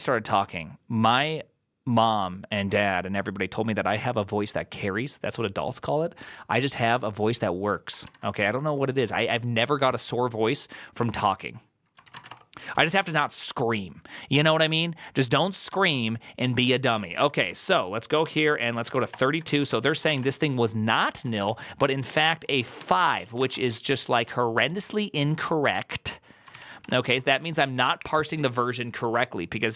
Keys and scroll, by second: 9.0 alt++, 9.0 alt+{, 11.8-12.8 typing, 12.9 ctrl+u, 15.5 shift+a, 16.6 ctrl+a, 17.1-21.3 typing, 21.2 ctrl+a, 22.3 ctrl+a, 22.4-24.1 typing, 26.4 ctrl+c, 26.4-27.6 typing, 26.5 ctrl+c.